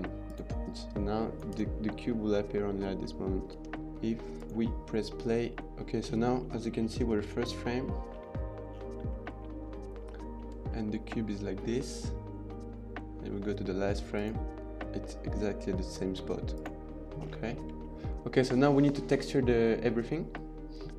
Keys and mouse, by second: 0.1 click, 1.4 space, 3.4 space, 4.3 click, 6.3 middle click, 6.9 middle click, 9.0 middle click, 10.0 shift+middle click, 14.1 click, 16.5 click, 17.7 shift+middle click.